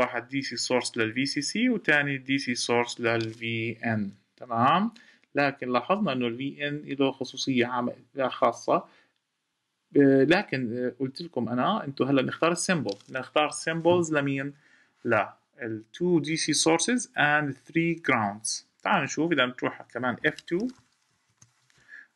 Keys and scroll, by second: 20.9 F2.